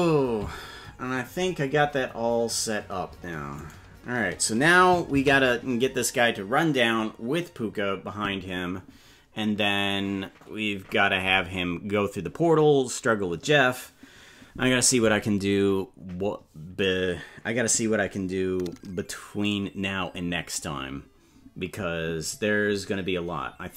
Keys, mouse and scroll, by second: 3.8 right click, 7.7 ctrl+s.